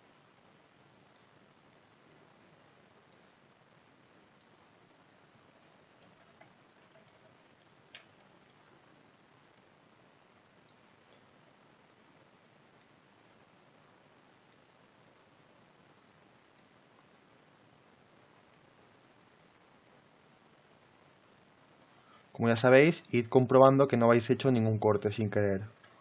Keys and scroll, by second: 6.6 ctrl+z.